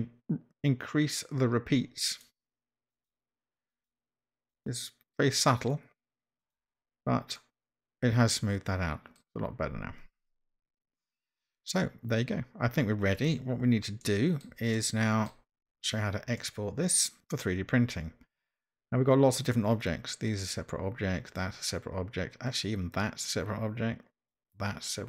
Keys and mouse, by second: 2.2 click, 3.0 click, 3.8 click, 4.5 click, 6.4 click, 7.3-9.2 middle drag, 13.2 click, 14.0 middle click, 14.8-15.3 shift+middle drag, 16.4-17.2 middle drag, 19.8 click, 20.4 drag, 21.3 click, 22.5 click.